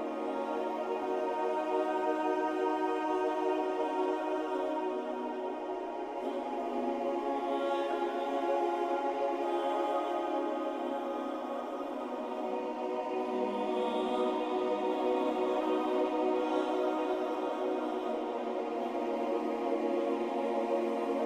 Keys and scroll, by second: 0.3 ctrl+y, 1.3 ctrl+y, 7.1 Down, 8.8 Down, 9.0 Down, 10.1 Down, 10.4 Up, 13.4 Up.